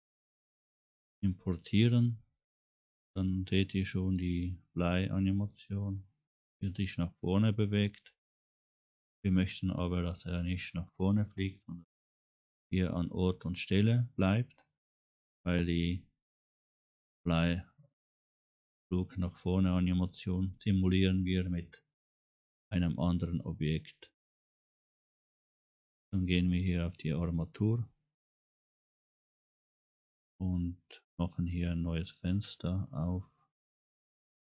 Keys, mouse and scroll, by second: 3.8 click, 5.4 click, 5.8-6.2 scroll down 3, 7.8 click, 8.6 click, 9.2 scroll up 2, 26.0 click, 31.7 click.